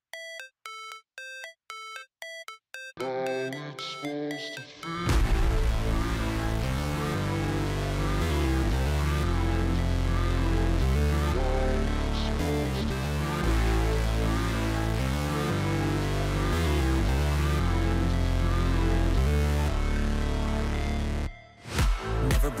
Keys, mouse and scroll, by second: 2.1 double click, 3.7-8.7 typing, 11.3 ctrl+a, 12.2 double click.